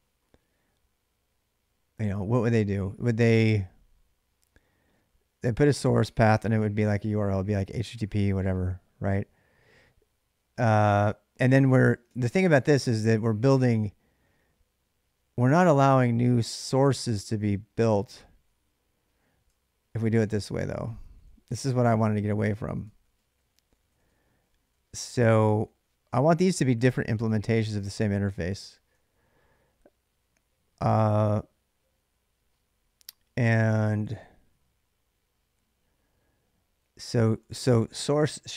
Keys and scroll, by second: 11.3-13.1 typing, 15.3-15.9 j, 17.6-28.7 typing, 37.0-38.5 typing.